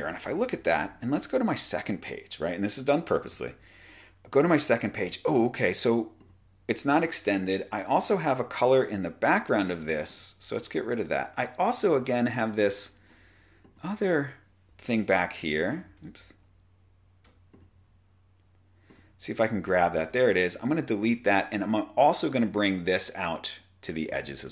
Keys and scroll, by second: 15.3 BackSpace, 15.9 super+z, 20.0 BackSpace.